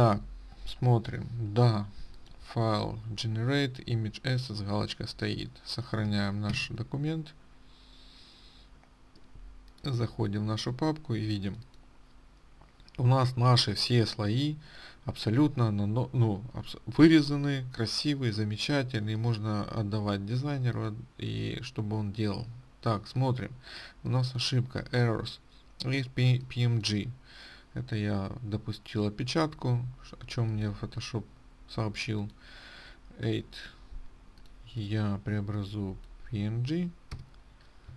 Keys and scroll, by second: 7.0 ctrl+s.